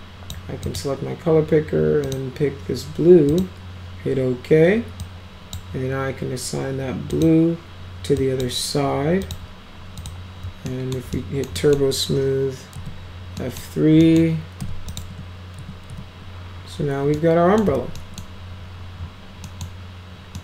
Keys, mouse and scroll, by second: 0.7 click, 2.1 click, 3.3 click, 5.0 click, 7.1 click, 8.2 drag, 9.2 click, 10.0 click, 10.7 alt+middle click, 11.2 middle drag, 11.6 middle drag, 12.7 F3, 13.4 middle click, 14.0 middle drag, 14.6 F4, 14.9 click, 15.1 F3, 15.6 F3, 17.2 alt+middle click, 17.7 z, 18.0 middle drag, 19.5 middle click, 20.3 middle drag.